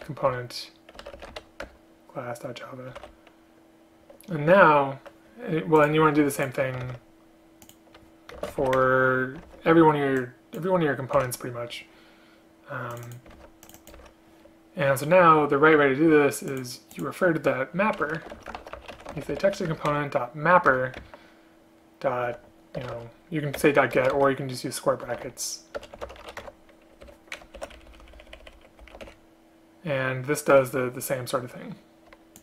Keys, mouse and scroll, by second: 0.4 Return, 1.7 Return, 6.5 shift+click, 7.0 ctrl+c, 8.5 space, 8.9 Return, 9.6 ctrl+v, 11.3 Delete, 13.5 ctrl+c, 14.1 ctrl+v, 19.8 Return, 20.8 Return, 22.9 BackSpace, 23.0 BackSpace, 24.1 BackSpace, 25.9 BackSpace, 27.7 shift+End, 27.9 shift+Left, 28.0 shift+Left, 28.1 shift+Left, 29.1 Delete.